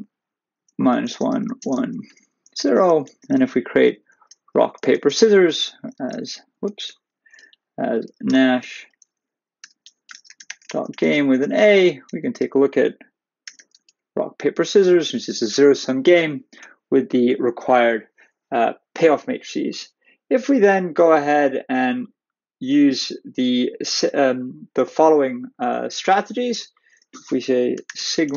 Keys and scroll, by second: 2.3 Right, 2.9 Return, 5.9 ctrl+a, 7.1 Down, 11.3 \, 11.7 ], 12.4 Return, 13.8 shift+Return.